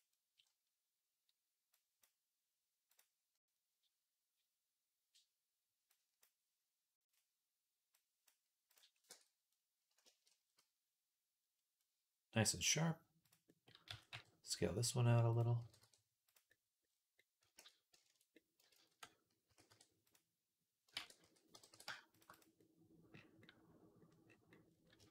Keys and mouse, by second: 0.0-5.7 right drag, 1.6-2.8 drag, 1.6-2.8 middle drag, 5.7-9.4 drag, 7.8 right click, 8.9 Tab, 9.4 right click, 9.9 shift+middle click, 11.9-17.8 drag, 13.7 s, 15.4 g, 18.8 ctrl+z, 19.3 s, 20.8 ctrl+a, 21.4 g, 22.4 click, 23.5-24.8 right drag.